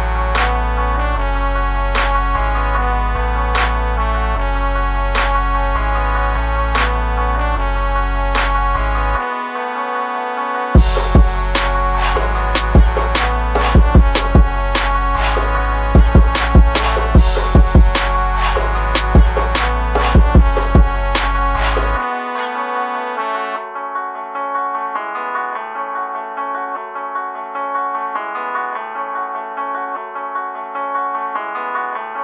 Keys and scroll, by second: 24.4 ctrl+z.